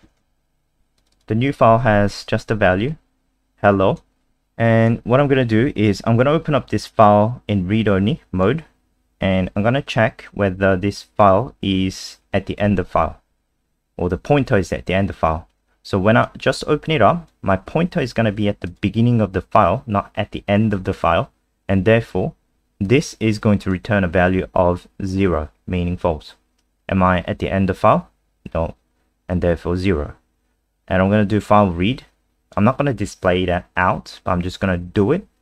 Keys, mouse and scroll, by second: 0.1 ctrl+s, 1.0 click, 1.1 click, 2.9 click.